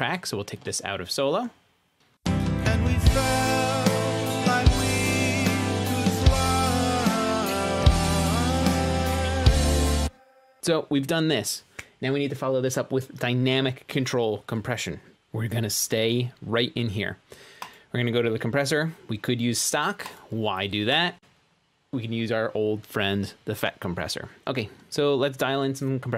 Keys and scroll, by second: 1.6 shift+super+s, 3.2 space.